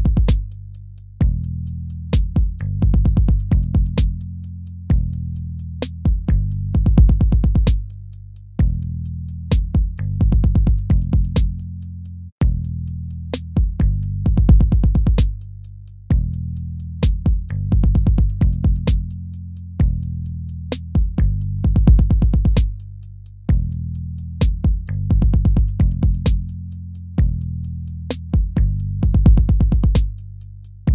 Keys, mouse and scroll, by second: 10.8 ctrl+-, 19.3 ctrl+-, 20.9 ctrl+-, 21.4 ctrl+-, 21.9 ctrl+-, 22.4 ctrl+-, 22.5 ctrl++, 24.6 ctrl++, 24.8 ctrl++, 26.1 ctrl++, 27.5 ctrl+-, 28.9 ctrl++.